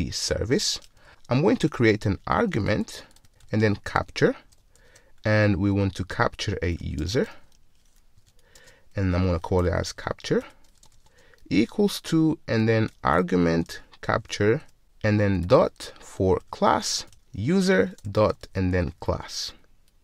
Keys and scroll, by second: 4.0 Return, 10.4 Return, 14.7 Return, 14.8 Return, 16.5 Return, 18.9 Return.